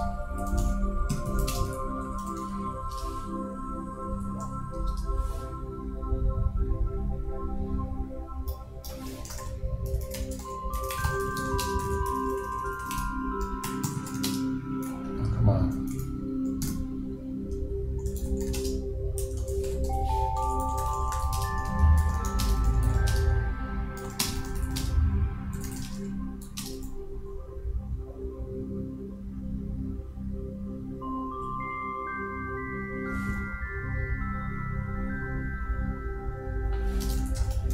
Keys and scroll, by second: 9.1-10.0 typing, 11.3-12.4 typing, 13.5-14.9 typing, 21.7-22.7 typing.